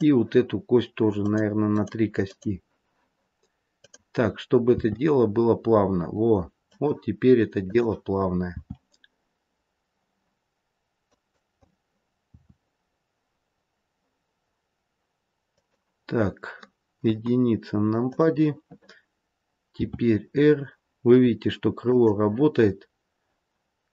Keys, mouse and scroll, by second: 1.2 click, 1.6 click, 3.7 click, 4.8 r, 7.6 click, 8.4 r, 12.3 r, 16.9 KP_1, 18.0 click, 19.6 r.